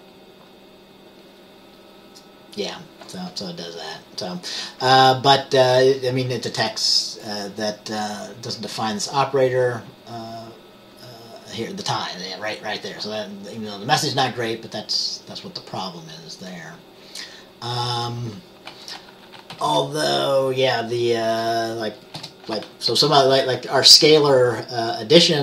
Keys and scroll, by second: 19.6 typing, 22.3 Return.